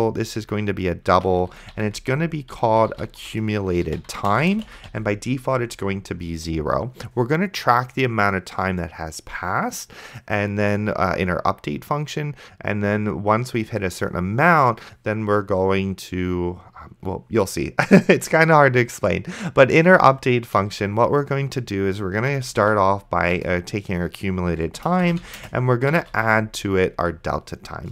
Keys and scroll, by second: 0.0-5.4 typing, 21.0 Return, 22.0-22.9 typing, 23.4 Return, 24.7-26.5 typing.